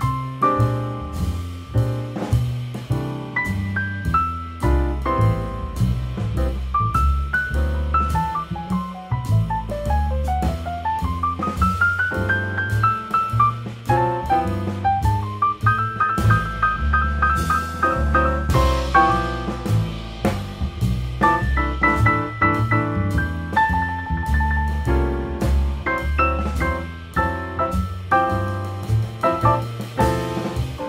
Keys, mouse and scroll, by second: 2.0 click, 2.5 scroll up 2, 6.6 click, 8.3-10.3 drag, 13.1 click, 13.5 scroll up 1, 16.6 shift+g, 17.8 shift+click, 19.4 shift+d, 22.1 r, 24.6 r, 26.3 r, 28.8-29.8 middle drag, 29.8 g.